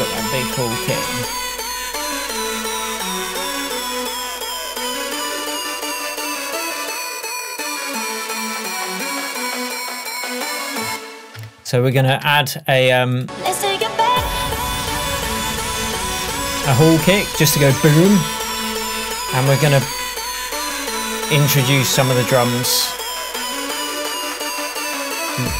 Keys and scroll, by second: 10.9 space.